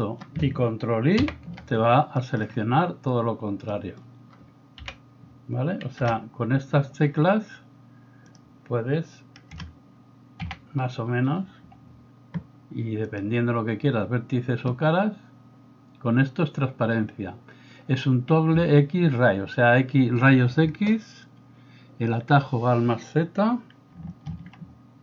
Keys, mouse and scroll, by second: 1.2 ctrl+i, 4.8 KP_1, 6.0 KP_0, 10.4 a, 24.3 alt+z.